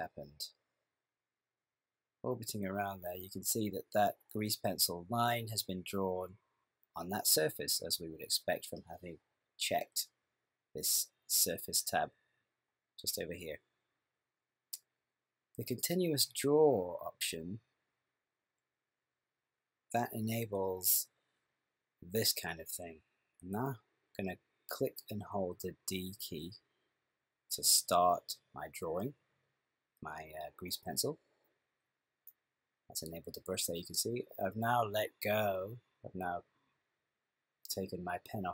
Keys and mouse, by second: 0.9 middle click, 9.0 click, 12.3 click, 26.6-31.2 d, 31.3 click.